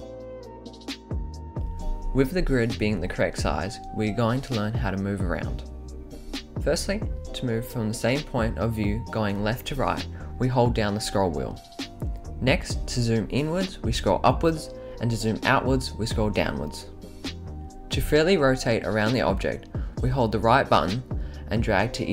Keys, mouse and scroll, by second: 0.0-1.6 typing, 0.2 click, 1.6 click, 3.2 click, 7.9-9.6 middle drag, 13.6-14.8 scroll up 11, 15.3 scroll down 3, 16.1 scroll down 2, 17.5-21.8 right drag.